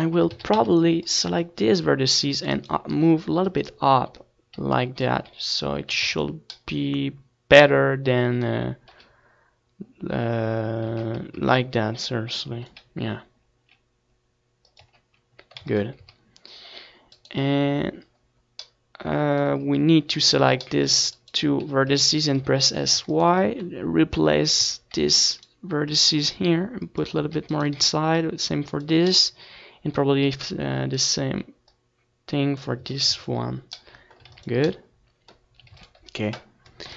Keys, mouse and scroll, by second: 0.9 ctrl+s, 4.2-5.5 drag, 5.5-7.5 typing, 5.9 Tab, 9.7-11.8 right drag, 10.6-12.5 drag, 12.5 z, 13.0 Tab, 13.4 ctrl+s, 13.9 middle click, 16.5 KP_1, 17.8-19.8 middle drag, 18.6 Tab, 19.0 z, 19.8-22.0 drag, 21.7 s, 22.8-24.7 drag, 23.0 Tab, 23.5 z, 23.6 ctrl+s, 24.2 a, 25.4-27.1 right drag, 26.2-27.8 middle drag, 28.0 Tab, 28.8-31.9 right drag, 30.8 s, 32.3 click, 32.8-35.0 middle drag, 33.8 z, 34.3 z, 35.0 right click, 36.4 click, 36.6 z.